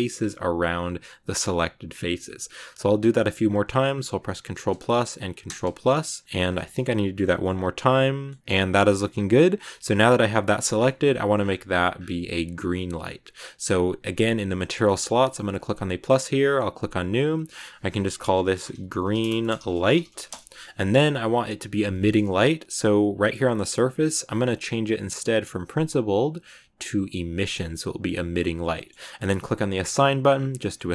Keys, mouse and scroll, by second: 4.4 ctrl+KP_Add, 5.3 ctrl+KP_Add, 6.2 middle click, 6.3 z, 6.6 shift+middle click, 6.8 scroll up 1, 6.9 middle click, 7.5 scroll up 2, 7.6-9.3 middle drag, 9.3-9.7 scroll down 2, 9.7-11.2 shift+middle drag, 11.2-12.5 scroll up 18, 12.5-14.9 scroll up 3, 14.9-15.4 scroll up 3, 15.4-17.2 drag, 17.3-18.9 drag, 18.9 e, 21.8 scroll down 4, 25.0-28.0 drag, 28.6-29.7 middle drag, 29.7 click, 30.4 middle click.